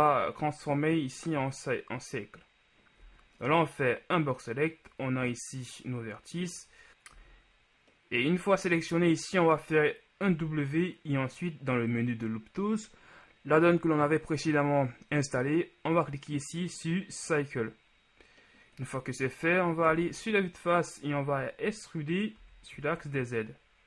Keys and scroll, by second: 3.3 z, 6.9 z, 10.5 w, 20.2 KP_1, 22.7 e, 23.0 z.